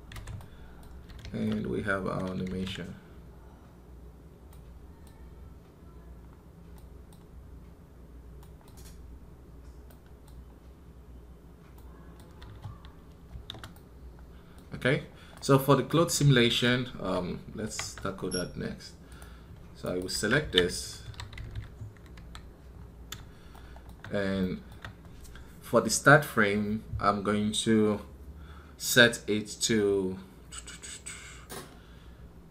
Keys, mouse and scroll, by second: 19.6 right click, 20.0 ctrl+Tab.